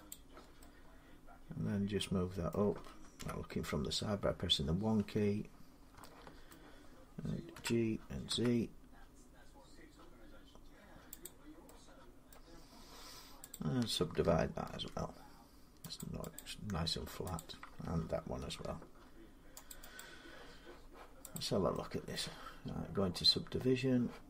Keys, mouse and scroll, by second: 2.3 middle click, 3.0 1, 4.4 scroll up 1, 4.4 scroll down 1, 6.3 shift+middle click, 7.4-8.1 typing, 9.3-11.0 shift+middle drag, 9.3 g, 11.0 click, 12.1 middle click, 12.4 scroll up 3, 13.5 click, 14.5 ctrl+r, 15.0 scroll up 1, 15.2 middle click, 15.8 click, 16.2 click, 17.2 click, 18.3 ctrl+r, 18.8 scroll, 19.8 click, 21.1 click, 21.2 middle click, 21.9 middle click.